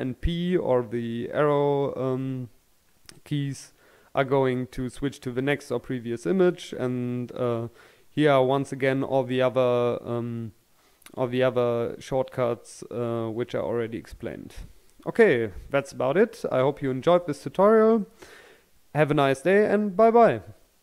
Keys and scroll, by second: 12.8-13.7 scroll up 1.